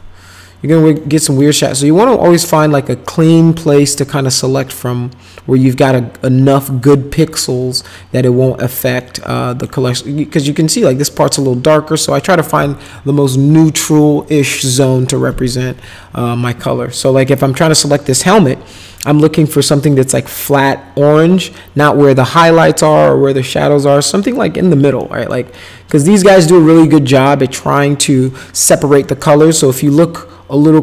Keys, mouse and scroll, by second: 1.2 middle click, 9.0 alt+middle click, 17.0 middle click, 25.0 middle click, 25.5 middle click.